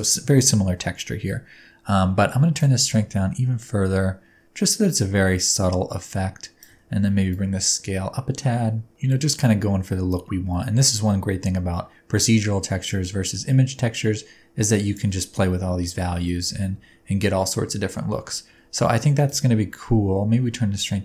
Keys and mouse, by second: 2.5-6.7 shift+drag, 6.7 middle click, 7.3-14.9 shift+drag, 15.0-19.3 middle drag, 19.3-21.0 shift+drag.